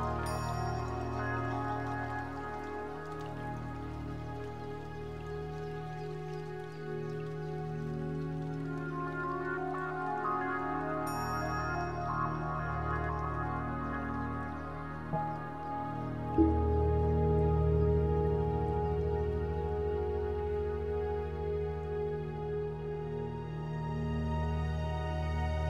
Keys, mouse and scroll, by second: 1.9 Tab, 2.3 s, 3.1 click, 3.6 Tab, 5.0 middle click, 7.1 shift+middle click, 8.3 click, 9.8 click, 10.5 middle click, 13.4 shift+middle click, 14.3 middle click, 18.9 Tab, 18.9 Escape, 18.9 click, 19.3 click, 19.9 click, 21.0 click, 24.5 Escape.